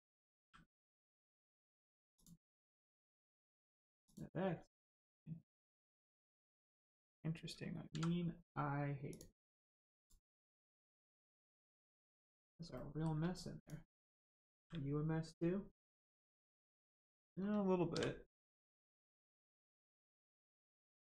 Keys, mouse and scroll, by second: 0.3 g, 1.5 right click, 2.1 click, 2.6 g, 3.5 right click, 4.0 click, 4.4 g, 6.6 click, 7.9 x, 9.1 click, 10.4 middle click, 11.0 scroll down 1, 11.2 shift+middle click, 12.2 scroll up 1, 12.7 shift+middle click, 13.5 click, 13.6 click, 14.5 g, 16.4 right click, 16.9 shift+click, 18.9 click, 19.8 shift+middle click.